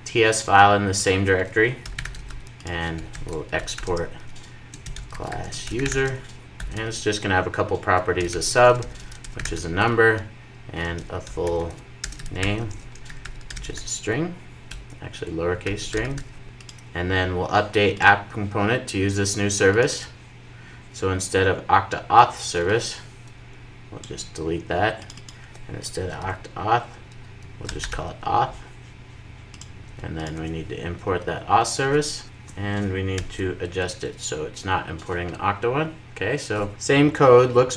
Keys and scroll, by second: 16.4 super+s, 17.8 super+s, 26.3 super+r, 29.8 super+s, 30.8 alt+Return, 32.2 super+s, 33.0 alt+super+l, 33.9 super+s.